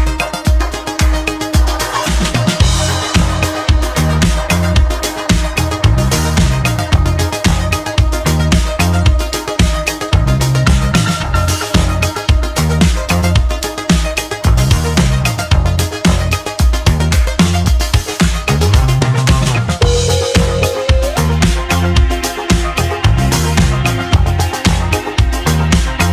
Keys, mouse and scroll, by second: 0.0 shift+click, 0.5-3.2 scroll down 2, 6.8 shift+click, 9.6-12.4 drag, 10.4-11.6 scroll down 2, 13.9 click, 15.9 click, 17.0 shift+click, 17.9-19.6 shift+drag, 20.0-20.3 scroll up 3, 20.3-21.0 scroll down 3, 21.0-21.4 scroll up 2, 21.4-21.9 scroll down 1, 21.9-22.7 scroll down 2, 22.7-23.5 shift+middle drag, 25.0-25.8 scroll up 4, 25.8-26.1 shift+middle drag.